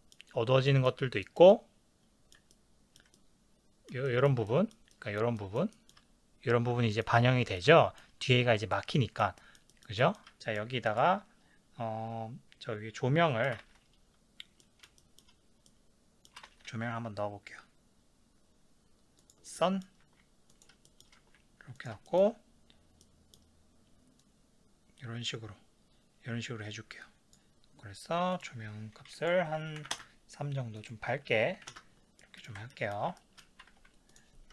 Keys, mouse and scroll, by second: 0.0-20.6 middle drag, 13.6 shift+a, 16.5 shift+a, 20.0 g, 20.6 click, 21.0-24.2 shift+middle drag, 21.2 g, 21.9 click, 24.2-32.2 drag, 30.0 KP_Enter, 31.8 KP_Enter, 32.2-34.2 middle drag, 33.7 ctrl+s, 34.2 click.